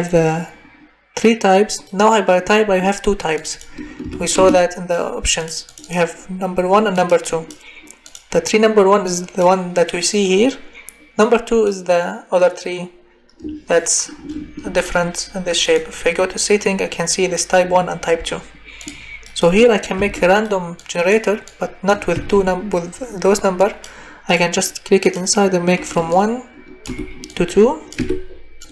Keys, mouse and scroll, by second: 4.0 1, 4.3 Return, 8.1 click, 19.9 Delete, 22.1 Delete, 26.8 1, 27.9 2.